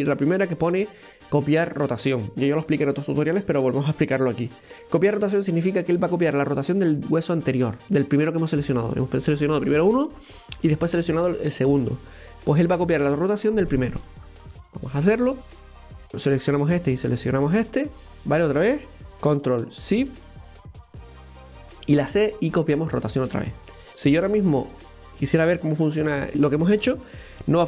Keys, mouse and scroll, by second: 15.8 right click, 17.3 shift+right click, 21.2 ctrl+shift+c, 23.7 middle click, 23.9 KP_1, 25.9-27.6 middle drag.